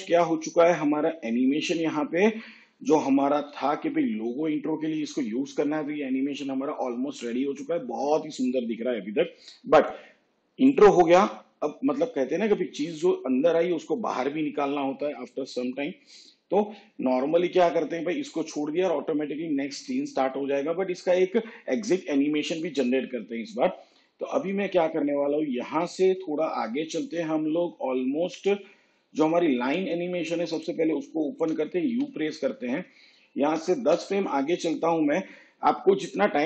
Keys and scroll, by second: 3.4 shift+/, 31.9 u, 33.4 shift+Page_Down.